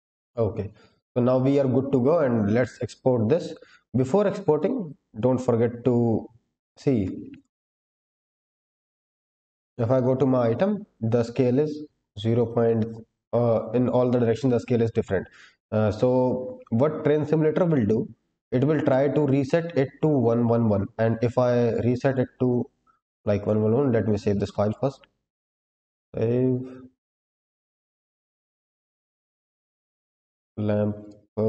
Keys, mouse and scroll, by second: 1.1-2.0 scroll up 1, 2.0-4.2 scroll down 1, 4.2-4.5 drag, 4.2-4.5 scroll down 1, 6.9 click, 7.2 click, 11.9-14.9 scroll up 2, 22.0-24.2 drag, 24.5-27.8 drag.